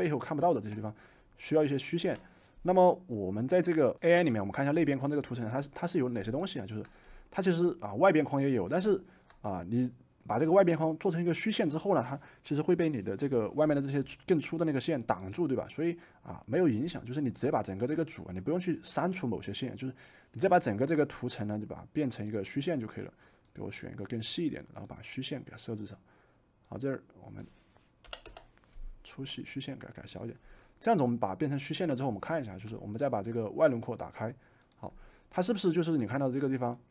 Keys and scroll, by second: 27.9 2, 28.2 Return.